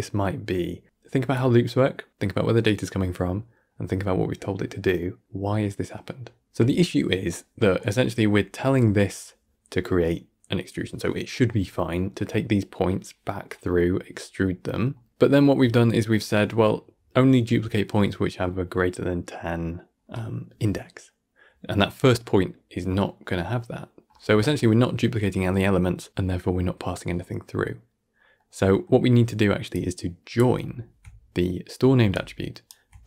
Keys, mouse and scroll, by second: 0.0-3.2 middle drag, 6.2 middle click, 6.8-8.4 middle drag, 8.4-8.7 scroll up 4, 8.7-15.5 middle drag, 15.5 scroll up 2, 15.7-20.2 middle drag, 24.3 scroll down 1, 24.4-27.6 middle drag, 28.0 scroll down 2, 28.3 middle click, 29.0-29.6 scroll up 4, 29.6 click, 32.0-33.0 ctrl+shift+right drag.